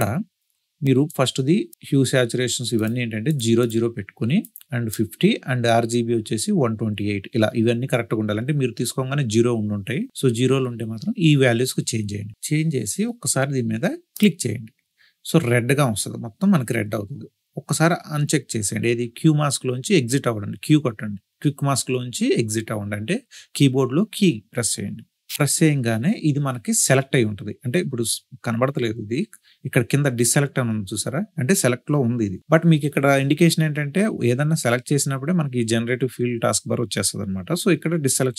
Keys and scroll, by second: 25.1 q.